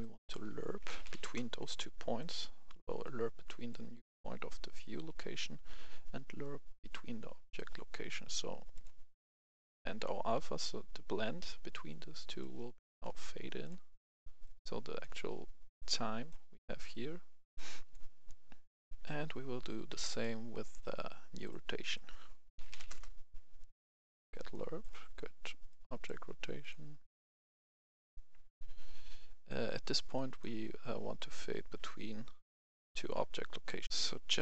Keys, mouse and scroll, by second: 0.7-1.1 typing, 1.2 Return, 2.1-13.5 drag, 14.9-16.9 drag, 18.6 right click, 18.7 F11, 18.8 F10, 19.8 right click, 21.4 click, 22.4 typing, 22.8 Return, 23.8 click, 24.7 right click, 25.6-31.2 drag, 33.8 F10.